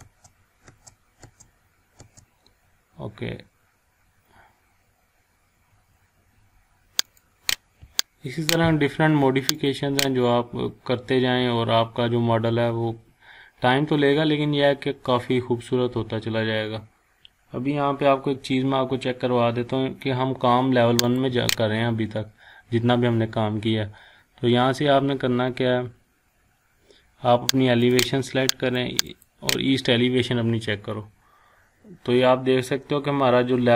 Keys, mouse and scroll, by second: 0.0 space, 7.2 click, 11.5-12.4 scroll down 1, 14.1 scroll up 1, 14.5-14.8 scroll down 1, 21.1 click, 27.9 click, 30.8-31.5 scroll down 1, 31.5-32.6 scroll down 1, 32.6 scroll up 1, 33.2 scroll down 1, 33.3 scroll up 1.